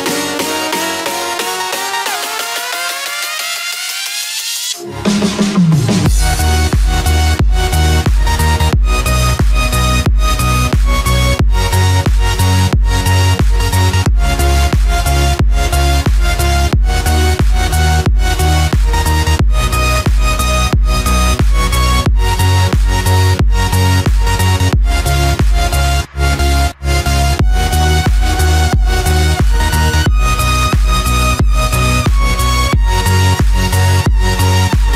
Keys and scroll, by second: 2.0 ctrl+-, 2.9 ctrl+=, 7.7 ctrl+-, 9.3 ctrl+=, 12.5 ctrl+=, 17.5 ctrl+-, 19.3 ctrl+=, 23.3 ctrl+=.